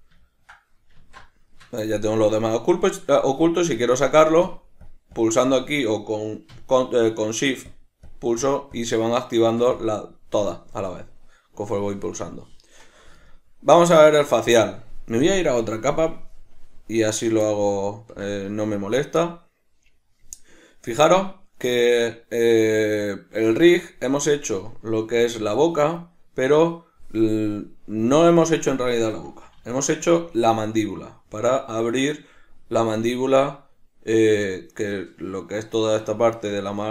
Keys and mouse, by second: 0.9 alt+q, 4.5 click, 5.1 click, 5.5 click, 7.6 shift+click, 8.0 shift+click, 8.4 shift+click, 8.7 shift+click, 9.7 click, 13.2-15.2 ctrl+middle drag, 15.2 click, 17.6-28.0 ctrl+middle drag, 28.0 click, 29.6 alt+q, 30.3 shift+middle click, 30.8 right click.